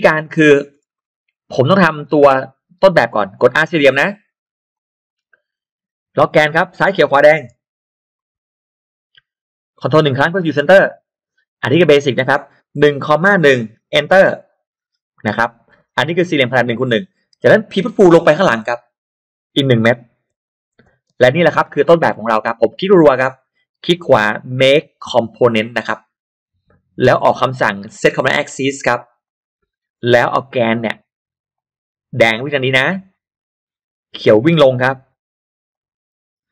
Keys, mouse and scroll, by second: 0.2-1.0 scroll up 2, 1.5 scroll up 1, 4.1 r, 4.7 click, 7.4 Left, 8.2 Right, 8.6 Right, 12.7-13.3 typing, 14.2 Return, 15.7 middle click, 16.2 scroll up 1, 17.8 p, 18.4 click, 20.2 1, 20.7 Return, 21.0 space, 21.4-21.8 scroll down 1, 21.8 middle click, 22.3-22.6 scroll up 2, 22.8 click, 23.2 click, 23.6 right click, 25.8 click, 29.1 click, 31.5 click, 32.8 click, 35.6 click.